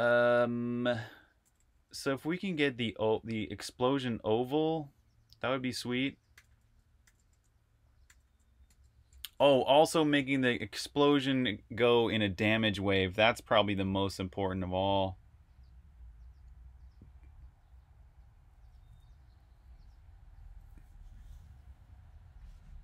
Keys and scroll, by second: 0.0-2.0 typing, 2.7 super+`, 6.1-8.9 typing.